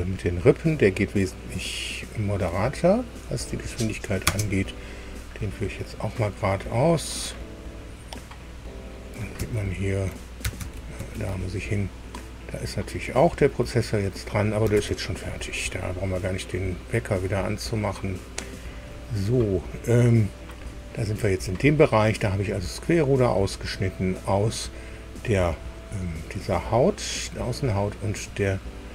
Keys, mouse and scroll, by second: 3.2 click, 4.2 space, 9.5 alt+Tab, 10.6 alt+Tab, 11.0 alt+Tab, 14.8 alt+Tab, 18.6 click.